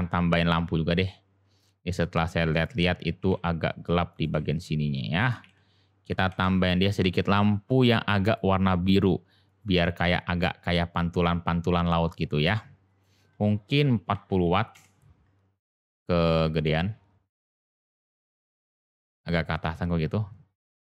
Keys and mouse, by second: 3.1 g, 4.3 s, 5.3 g, 8.3 click, 9.4 click, 12.9-15.3 drag, 16.6-17.6 middle drag, 18.6 g.